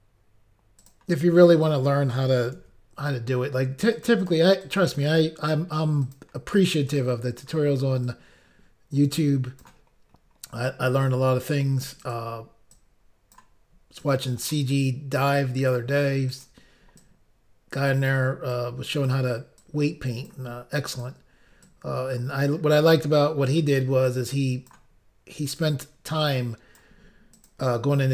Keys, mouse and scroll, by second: 0.8 click, 0.9 click, 2.6 ctrl+r, 3.3-3.7 scroll up 1, 3.9 click, 4.1 click, 4.2 click, 4.4 click, 4.7 double click, 6.0 double click, 6.1 double click, 6.9 click, 8.1 click, 10.0 scroll up 1, 11.1-11.4 scroll up 2, 12.0 click, 12.8 click, 14.0 click, 15.2 click, 16.3 click, 16.5 click, 17.0 click, 18.5 click, 19.6 click, 20.9 click, 21.1 click, 21.7 click, 23.5 click, 23.6 click, 24.1 click, 25.5 click, 25.6 click, 26.2 click, 27.4 click, 27.5 click.